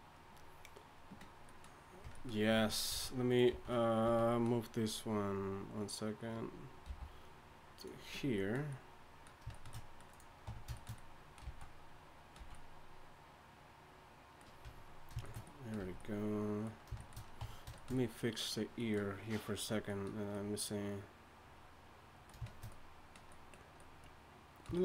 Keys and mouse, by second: 2.0 Tab, 2.5 z, 2.9 z, 3.5 z, 4.0 z, 6.8 m, 7.6 m, 10.1 click, 10.4 Tab, 11.4 z, 12.4 z, 14.6 Tab, 15.8 a, 17.4 Tab.